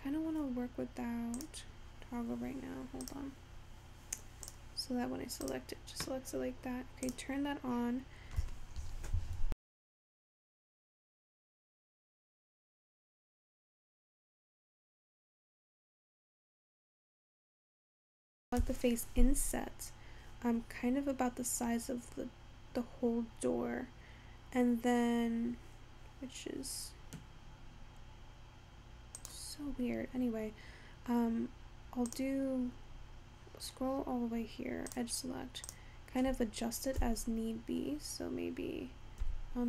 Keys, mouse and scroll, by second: 0.6-3.7 scroll down 9, 3.8 click, 7.2-9.2 drag, 9.2-11.2 scroll up 2, 18.8 i, 30.1-32.2 scroll up 2, 32.2 click, 33.5-34.0 scroll down 13, 34.0 scroll up 12, 35.1 click, 35.8 click, 37.0 g.